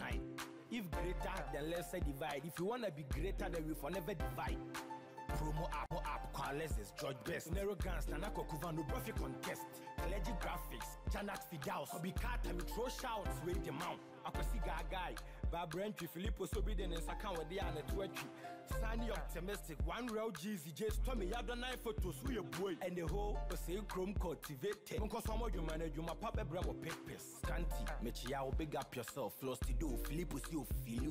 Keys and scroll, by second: 31.0 ctrl+j.